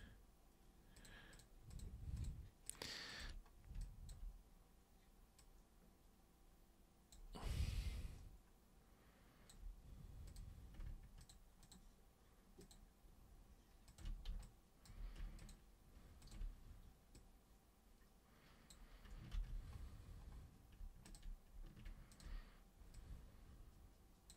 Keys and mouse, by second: 1.0 ctrl+shift+super+click, 1.3 ctrl+shift+super+click, 1.7 ctrl+shift+super+click, 2.2 ctrl+shift+super+drag, 2.6 ctrl+shift+super+click, 3.1 ctrl+shift+super+click, 3.8 alt+super+click, 5.4-7.1 super+drag, 7.5-9.5 alt+super+drag, 10.3 super+drag, 11.2 ctrl+shift+super+click, 11.6 ctrl+shift+super+click, 12.6 ctrl+shift+super+click, 13.9 ctrl+shift+super+click, 14.4-14.9 alt+super+drag, 15.4 ctrl+shift+super+click, 16.2 ctrl+shift+super+click, 17.2-18.7 super+drag, 19.3 ctrl+super+z, 21.0 ctrl+super+click, 22.1 ctrl+shift+super+click, 22.9-24.3 super+drag.